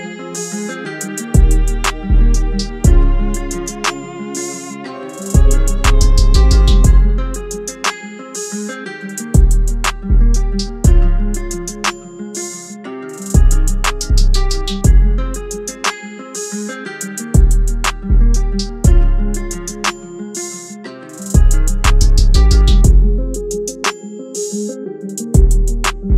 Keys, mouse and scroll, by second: 18.2 double click, 20.7-21.3 typing, 22.7-23.9 typing.